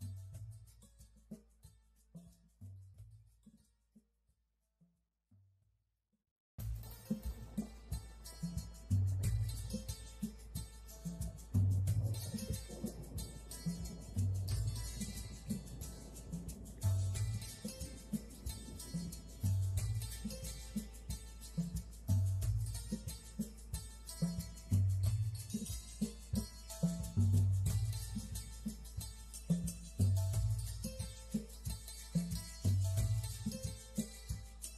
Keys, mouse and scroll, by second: 0.4 click, 0.7 click, 1.7 click, 2.4 click, 2.8 click, 3.2 click, 3.9 click, 4.7 click, 5.6 click, 6.6 click, 7.0 scroll up 2, 7.9 click, 8.1 scroll down 1, 8.6 click, 9.0 click, 9.8 click, 10.6 click, 11.1 click, 13.7 click, 14.2 click, 14.7 click, 17.1 middle click, 20.0 click, 20.8 s, 21.8 click, 24.4 g, 26.0 click, 26.7 g, 27.5 click, 28.1 right click, 28.6 click, 29.6 click, 31.2 shift+d, 32.1 click, 33.2 shift+d, 34.5 shift+d.